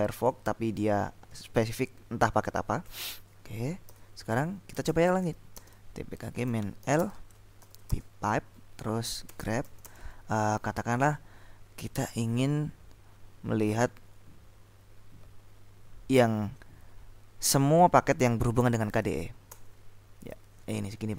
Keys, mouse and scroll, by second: 0.3-0.9 scroll up 2, 2.9-3.5 scroll up 2, 3.9 ctrl+l, 4.7-8.0 typing, 9.1-10.2 typing, 18.5-19.5 typing, 19.7 Return, 21.1 scroll up 2.